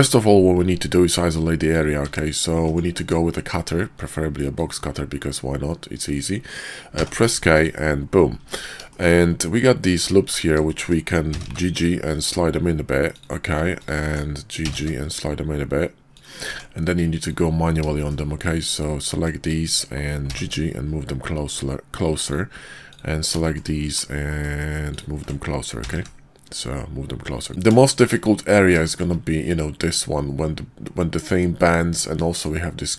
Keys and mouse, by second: 1.7 click, 2.7 d, 2.9 alt+w, 4.6-7.7 drag, 8.4 Tab, 8.9 shift+click, 9.9 alt+click, 10.7 shift+click, 11.3 g, 13.8 alt+click, 14.5 g, 16.4 Tab, 17.1 click, 17.9 shift+click, 19.2 ctrl+click, 20.1 g, 22.8 click, 23.4 shift+middle click, 25.7 g, 27.9 shift+middle click, 28.8 shift+middle click, 31.6 middle click.